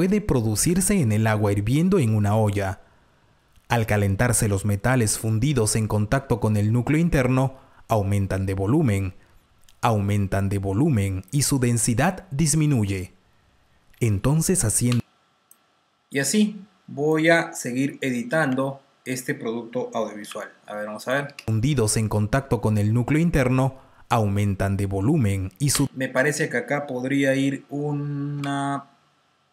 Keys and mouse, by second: 11.2 click, 12.8 t, 16.5 click, 16.5 space, 18.6 Delete, 21.5 click, 21.5 r, 21.5 space, 25.6 space, 26.1 click, 27.5 click.